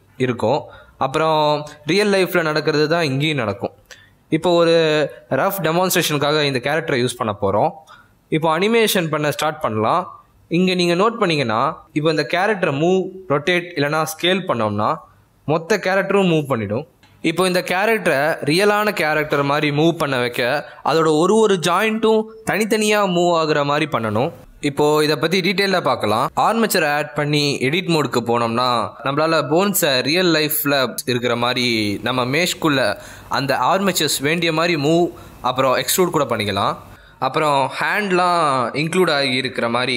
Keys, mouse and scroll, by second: 3.8 click, 4.6 middle click, 7.3 shift+middle click, 9.7 middle click, 10.5 g, 12.0 r, 13.5 s, 17.1 middle click, 20.0 shift+middle click, 24.5 middle click, 24.6 shift+middle click, 25.0 click, 25.5 Tab, 25.5 middle click, 25.6 click, 25.8 click, 26.0 g, 26.4 scroll up 2, 26.6 middle click, 26.6 z, 26.7 click, 26.8 right click, 27.4 right click, 27.6 middle click, 27.8 click, 27.9 shift+middle click, 28.1 shift+d, 28.9 click, 29.0-29.4 scroll up 2, 29.2 click, 29.4-33.0 typing, 30.0 middle click, 30.1 shift+middle click, 30.6 click, 30.8 shift+middle click, 31.6 middle click, 31.7 shift+middle click, 31.7 middle click, 31.9 shift+middle click, 31.9 scroll up 3, 32.2 shift+click, 32.3 shift+click, 32.4 shift+middle click, 32.9 click, 33.1 shift+middle click, 33.2 middle click, 33.6 click, 33.6 middle click, 33.8 shift+middle click, 34.0 click, 34.1 scroll down 2, 34.2 shift+middle click.